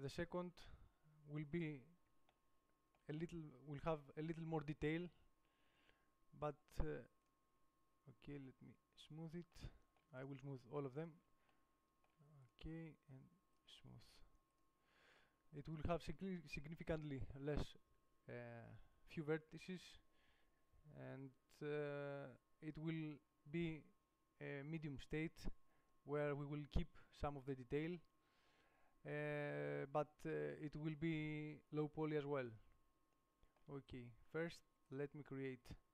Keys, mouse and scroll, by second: 0.9-1.9 drag, 1.9 middle click, 4.6-5.8 right drag, 5.8-7.4 middle drag, 7.6 click, 9.5 middle click, 10.3 right click, 12.2 click, 12.7 middle click, 13.7-15.6 drag, 31.7-32.9 middle drag, 34.1 middle click, 35.1 right click, 35.3-35.9 middle drag.